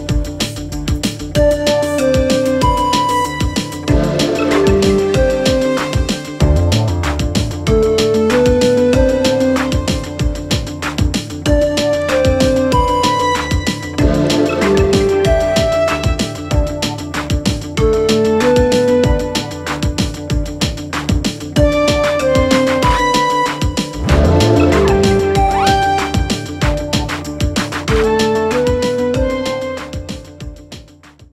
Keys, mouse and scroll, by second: 6.6-9.4 drag, 10.3-12.5 typing, 12.0 click, 19.1-19.9 typing, 19.4-25.8 drag, 25.7-26.9 typing.